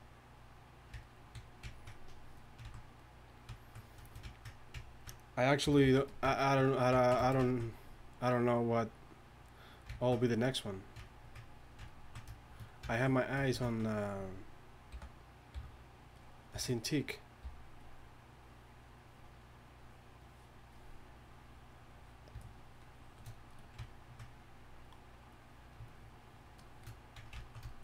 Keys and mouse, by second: 1.7 click, 2.6-4.3 drag, 5.6 g, 5.8 f, 8.8-13.2 drag, 13.3-14.9 drag, 15.5 f, 17.4 f, 18.5-19.4 drag, 24.8-27.8 drag.